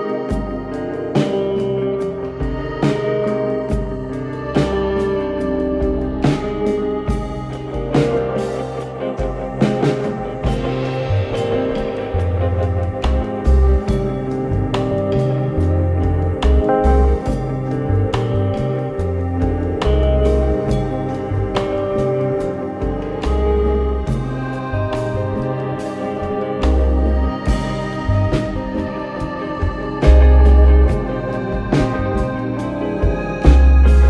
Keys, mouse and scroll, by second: 0.3 click, 0.8-1.4 scroll up 2, 1.4 Tab, 2.3 click, 4.4-5.1 drag, 5.1 scroll up 2, 5.9 scroll up 1, 5.9 scroll down 1, 7.9 b, 10.4 click, 11.6 click, 13.9-15.4 drag, 15.8 b, 16.8 click, 17.4 b, 19.4 click, 21.0-21.7 scroll down 1, 21.7 click, 22.8 b, 24.5 click, 26.4-26.9 scroll up 6, 27.7-29.6 drag, 32.0 click, 32.9-33.2 scroll down 1, 33.4 b.